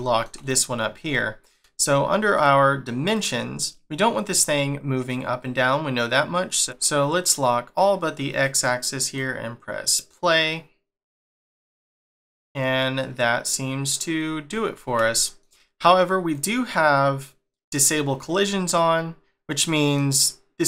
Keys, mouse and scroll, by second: 2.3 click, 3.1 click, 3.8 scroll up 2, 6.5 click, 8.3 click, 9.0 click, 11.3 click, 12.1 middle click, 14.2 scroll down 2, 15.1 shift+middle click, 16.3 click, 18.5 scroll up 2, 19.2 scroll down 2, 19.7 middle click, 20.1 scroll up 2.